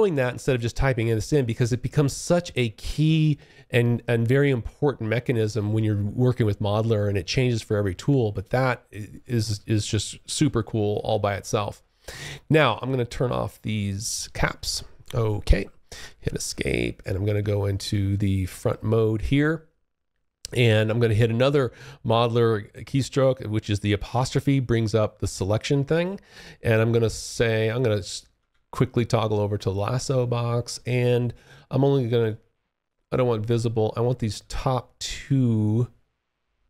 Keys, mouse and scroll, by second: 12.4 click, 13.7 alt+click, 15.0 Escape, 15.7 alt+click, 16.5 space, 16.9 3, 17.6 space, 23.7-27.4 `, 27.6-29.5 `, 31.3 click, 31.9 click, 34.3 click.